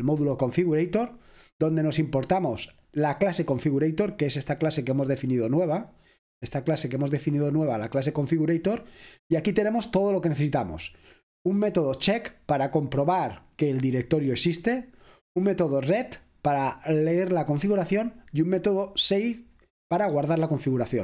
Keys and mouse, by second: 0.0 click, 0.3 click, 2.7 click, 4.6-8.3 drag, 12.0-15.0 drag, 16.0 click, 19.1 click.